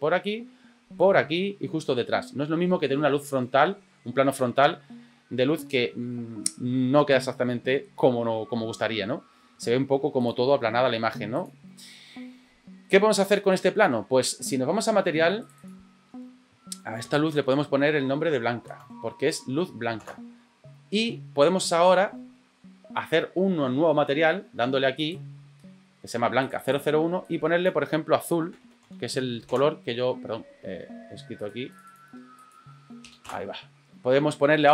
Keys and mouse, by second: 9.6 r, 10.8 g, 15.4 click, 15.6-20.1 drag, 20.0 Return, 25.0 click, 26.4 click, 26.6-30.6 drag, 31.3 click, 31.7-33.5 drag.